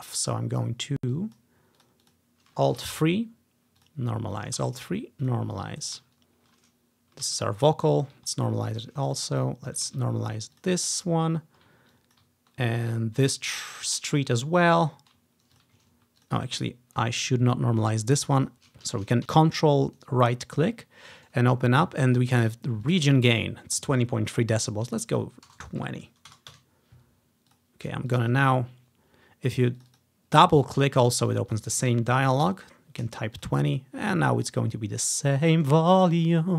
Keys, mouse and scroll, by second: 1.2 click, 1.9 click, 2.1 click, 2.9 alt+3, 3.9 click, 4.4 click, 4.7 alt+3, 5.4 click, 5.7-6.8 drag, 7.3 alt+3, 8.0 click, 8.6-9.0 scroll down 1, 9.5-11.4 ctrl+drag, 10.0 alt+3, 12.0 ctrl+click, 12.8 alt+3, 13.8 click, 14.0 ctrl+scroll down 1, 14.8 ctrl+scroll up 1, 15.6 click, 16.3 click, 18.5 click, 19.0 ctrl+z, 22.2-24.6 drag, 25.0-26.4 drag, 25.6 BackSpace, 25.7 BackSpace, 25.9 0, 26.6 Return, 27.6 click, 28.2 click, 29.9 click, 30.0 click, 31.4 click, 32.0-32.5 typing, 33.4 click, 33.8 click, 34.1 click.